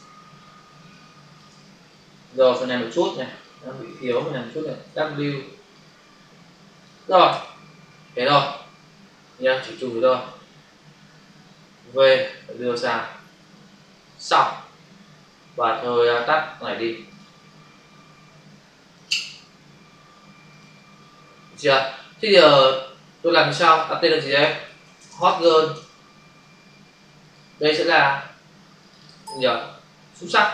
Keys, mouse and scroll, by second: 0.8 click, 1.0 space, 2.3 ctrl+click, 3.3 click, 4.7 w, 5.6 alt+click, 7.3 ctrl+0, 8.3 ctrl+-, 10.0 shift+F6, 10.6 Return, 11.7 v, 12.1 click, 14.0 click, 14.1 click, 16.0 click, 16.1 click, 17.0 click, 17.1 click, 18.9 click, 19.0 click, 20.5 click, 21.3 click, 23.4 click, 23.5 click, 23.6 click, 23.7 click, 24.4-25.4 typing, 25.7 Return, 27.2 click, 27.3 click, 27.5 click, 27.6 click, 28.7 click, 28.9 click.